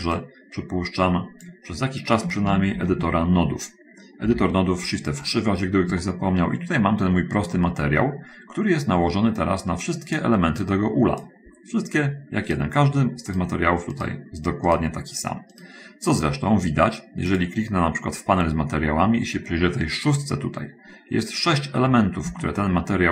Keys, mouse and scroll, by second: 0.6-2.0 drag, 3.2 shift+F3, 4.6 n, 5.2 middle click, 6.3-7.6 shift+middle drag, 7.8 middle click, 9.8 click, 11.0 click, 12.9 right click, 13.8 right click, 14.4 right click, 15.1 right click, 16.0 right click, 17.4 click, 22.8-23.1 shift+middle drag.